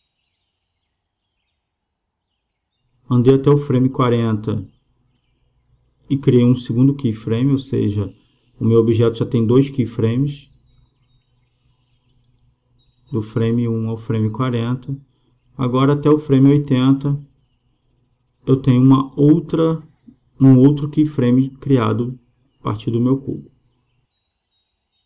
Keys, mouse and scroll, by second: 0.0 g, 3.0-4.7 drag, 5.0-6.8 drag, 9.5 r, 11.7-13.4 drag, 16.6 g, 20.7 r, 24.2-25.0 drag.